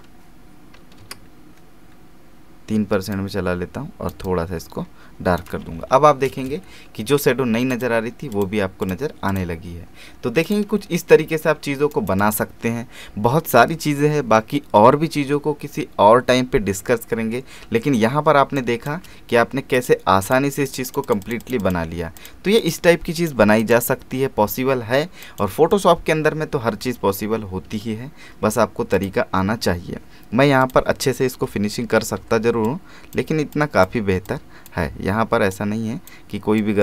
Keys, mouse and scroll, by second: 1.2-3.1 scroll down 1, 3.1-5.6 drag, 5.6 alt+space, 5.7 alt+scroll down 1, 6.1 alt+space, 6.5 v, 7.7 click, 10.7 alt+space, 10.8 alt+scroll down 1, 11.2 alt+space, 11.9 right click, 12.2 click, 14.3 space, 17.7 alt+space, 19.7 click, 26.9 space, 27.1 alt+scroll up 1, 28.9 click, 31.5 [, 32.6-36.8 drag.